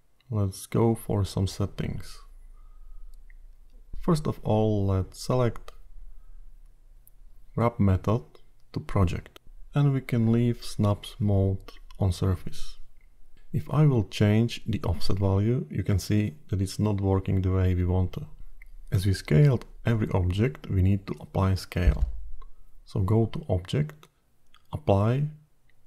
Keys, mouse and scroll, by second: 0.1 click, 6.5 click, 9.0 click, 15.8 click, 20.7 click, 24.2 click.